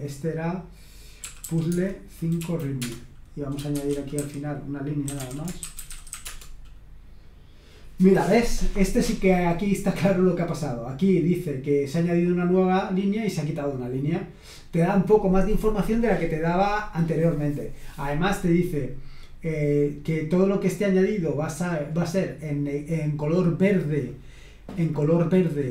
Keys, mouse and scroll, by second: 1.0-6.8 typing, 10.3-11.5 drag, 13.2 click.